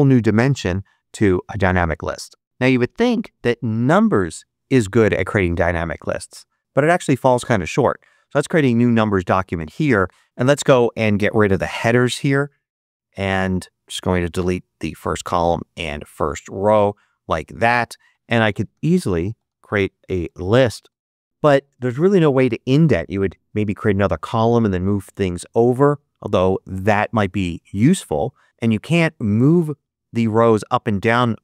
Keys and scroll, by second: 10.2 super+z, 18.1-20.9 typing.